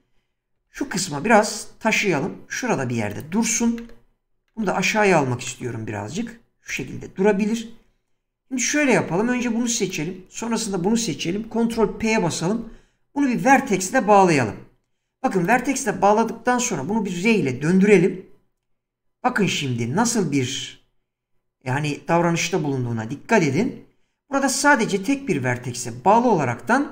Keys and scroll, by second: 0.6 g, 3.6 g, 11.7 ctrl+p, 17.7 r.